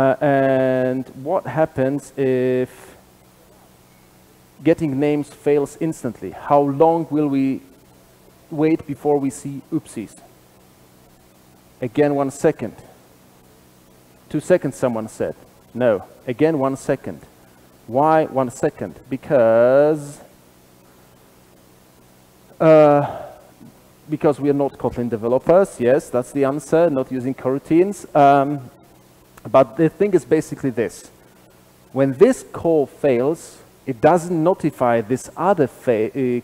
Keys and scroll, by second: 2.3 super+/, 13.1 ctrl+r, 13.1 shift+F10, 18.7 super+[, 18.7 ctrl+alt+Left, 20.3 super+b.